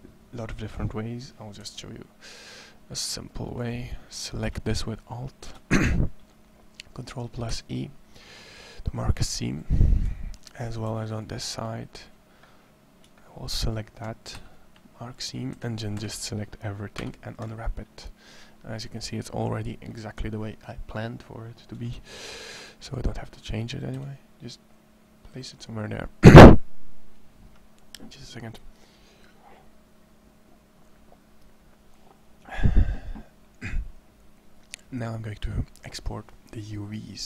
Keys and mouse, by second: 12.3-13.4 middle drag, 14.2 ctrl+e, 15.7 a, 16.8 u, 21.5 s, 23.8 g, 35.6 middle click.